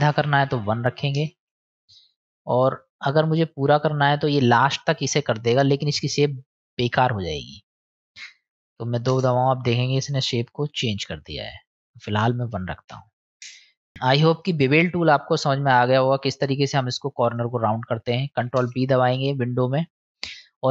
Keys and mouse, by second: 2.6 middle click, 3.7 middle click, 7.1-9.7 drag, 11.7-13.9 drag, 14.3 click, 16.2 middle click, 17.3 click, 18.4 ctrl+b, 20.1-20.7 drag.